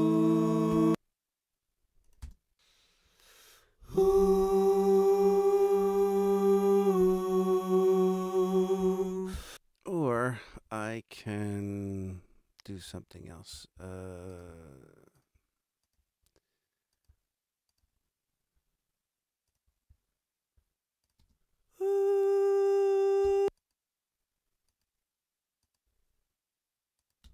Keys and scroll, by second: 0.7 space, 2.2 space, 9.3 space, 21.1 space, 23.2 space, 27.2 space.